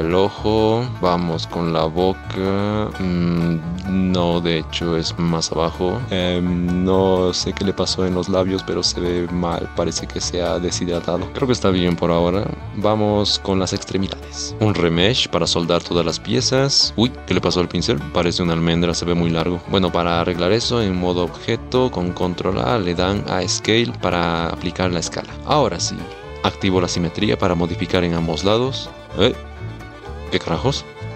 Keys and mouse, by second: 1.0 shift+click, 1.2 shift+click, 2.1 click, 3.5 shift+click, 3.8 shift+middle click, 4.3 middle click, 4.5 click, 4.5 KP_3, 5.3 ctrl+click, 6.0 ctrl+z, 6.5-7.9 middle drag, 9.0 middle click, 11.3 ctrl+Tab, 14.5 KP_3, 16.9 ctrl+z, 17.3 click, 18.3 click, 19.6 ctrl+z, 21.1-21.6 drag, 22.1 ctrl+a, 25.3 click, 29.3-30.5 middle drag, 30.6 middle click.